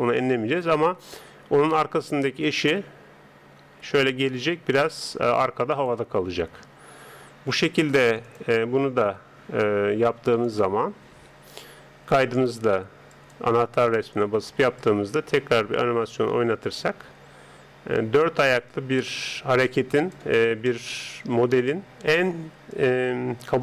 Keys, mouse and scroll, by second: 2.5 right click, 3.6 g, 7.0 n, 8.3-18.0 drag, 8.8 n, 9.6 n, 11.1 n, 20.4-22.7 middle drag, 22.7 click.